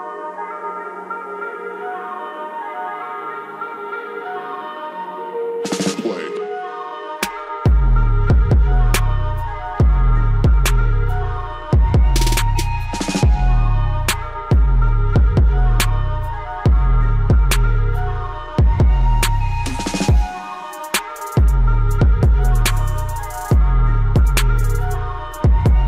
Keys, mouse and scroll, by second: 8.8 click, 11.3 scroll up 1, 12.4 scroll down 1, 12.8 right click, 14.0 click, 16.2 scroll up 1, 17.4-23.0 drag, 23.0 scroll down 1, 24.7 click.